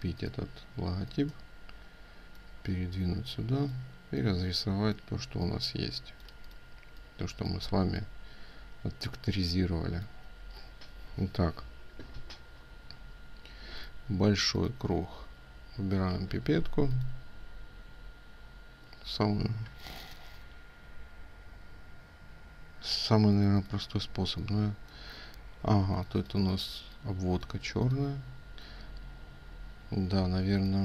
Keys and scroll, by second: 22.8 ctrl+space.